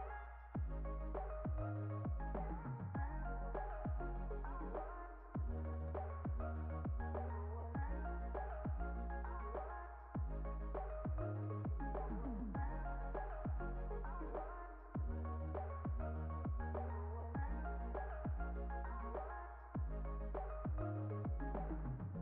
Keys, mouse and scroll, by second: 0.0 click, 1.5 click, 3.0 click, 3.4 right click, 5.8 click, 6.1 click, 6.6 r, 8.0 click, 8.6 click, 9.4 click, 10.6 click, 11.3 click, 12.1 click, 13.6-15.0 drag, 15.0 KP_0, 15.6 click, 16.0 KP_0, 16.3-17.9 drag, 18.6 click, 18.9-20.4 drag, 21.2-22.2 drag.